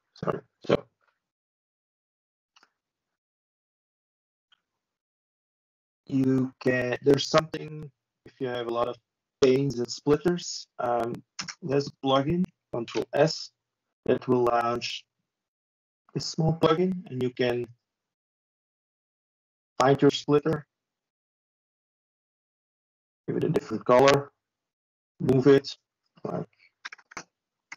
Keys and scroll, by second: 3.1 Delete, 9.2 ctrl+space, 12.1 ctrl+e.